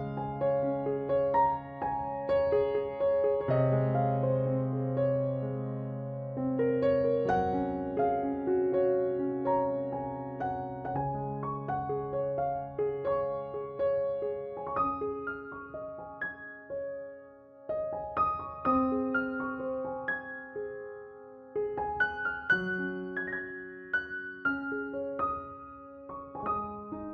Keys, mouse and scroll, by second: 1.6 b, 1.9-5.1 drag, 2.0 g, 3.4 b, 3.7 g, 5.7 ctrl+Tab, 7.3 click, 7.5 c, 9.5 z, 10.4 e, 12.4-14.0 drag, 13.4 Tab, 14.3 z, 14.6 ctrl+s, 16.6 Tab, 22.4 ctrl+Tab, 24.2 ctrl+r, 26.7-27.1 right drag.